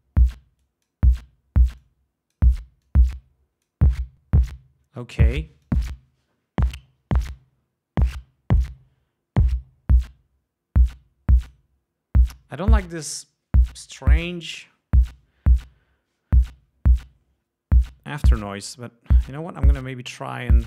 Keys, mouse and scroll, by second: 0.7-1.2 drag, 1.9-2.6 drag, 2.9-4.0 drag, 5.8-6.2 drag, 7.4-8.9 drag, 9.5-11.8 drag, 18.2 right click.